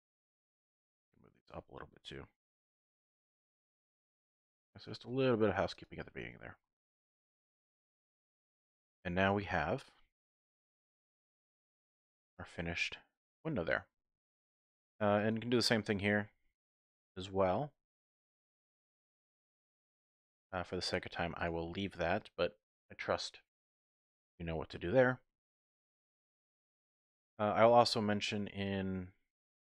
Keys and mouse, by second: 0.7 click, 2.4 g, 2.6 z, 3.1 click, 4.4 click, 5.0 g, 5.1 z, 5.7 click, 6.4 Tab, 7.0 z, 7.9 shift+click, 8.3 click, 8.6 click, 8.9 middle click, 9.2 typing, 9.4 shift+click, 12.0 click, 12.5 click, 12.8-13.8 middle drag, 13.5-13.8 typing, 13.8 click, 14.5 shift+click, 15.2 click, 15.3 typing, 15.7 Tab, 17.3-18.7 drag, 18.7-20.3 middle drag, 20.4 Tab, 20.8 middle click, 21.8 shift+click, 25.1 click, 25.3 middle click, 25.5 click, 25.5 middle click, 26.2 click, 26.3 middle click, 27.3 middle click, 27.3 typing.